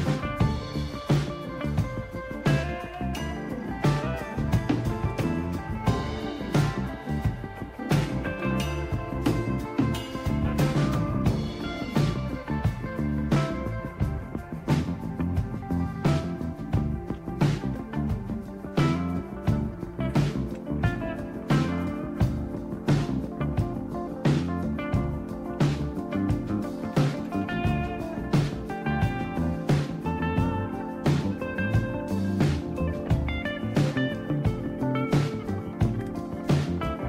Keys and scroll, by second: 1.5-3.5 typing, 4.8 typing, 6.9-9.2 typing, 13.4 Left, 13.9 typing, 14.0-17.3 Left, 20.9 ctrl+o, 21.6 Return, 24.1 ctrl+x, 26.9 typing, 33.0 BackSpace, 33.5 BackSpace, 33.7 BackSpace, 33.8 BackSpace, 35.3-36.2 typing.